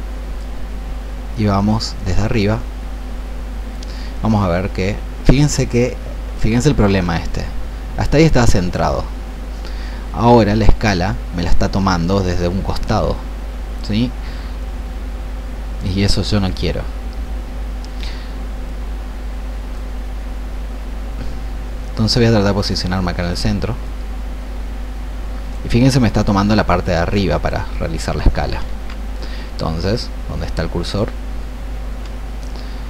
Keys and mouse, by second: 2.0-4.1 drag, 7.1 ctrl+z, 10.5-23.3 drag, 24.0-27.6 drag, 28.6 ctrl+z, 30.7-32.8 drag.